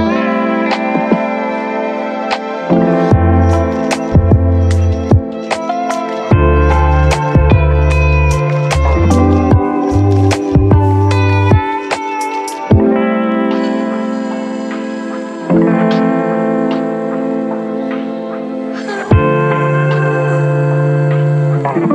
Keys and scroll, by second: 6.4 Delete, 14.0 z, 14.9 space, 15.6 ctrl+1, 16.2 1, 17.5 ctrl+z, 19.2 space, 20.3-21.1 typing.